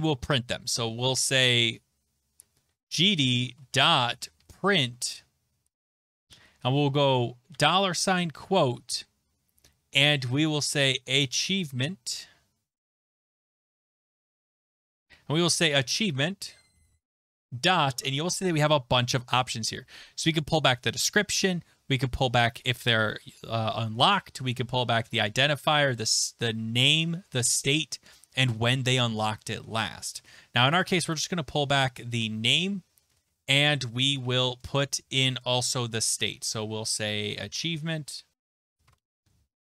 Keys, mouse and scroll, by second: 2.4-6.3 typing, 7.3-8.4 typing, 10.0-11.8 typing, 13.1-14.2 typing, 15.3-17.5 typing, 22.6-22.9 scroll, 27.7-28.2 scroll, 30.8 click, 30.9 click, 32.0 click, 32.9 middle click, 33.0 shift+], 33.1 }, 36.1 click, 36.1-39.6 typing.